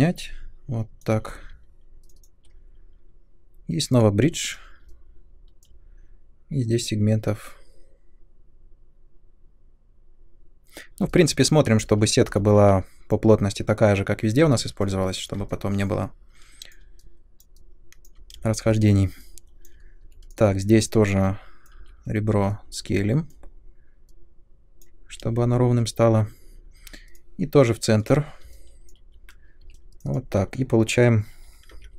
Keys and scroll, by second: 1.1 space, 18.3 space, 20.0 2, 21.7 r, 25.2 space, 29.6 3, 31.7 shift+v.